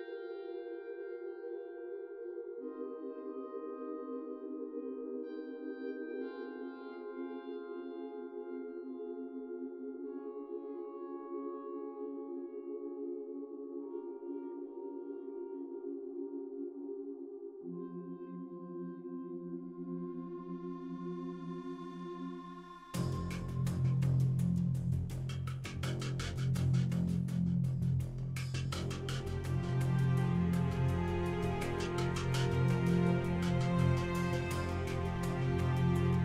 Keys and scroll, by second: 0.6 3, 4.6 e, 8.4 i, 13.1 i, 15.2 i, 17.2 Tab, 22.9-24.2 typing, 24.4 Return, 30.9 ., 31.1 2, 31.2 5, 31.5 Return, 35.5 g, 35.8 z.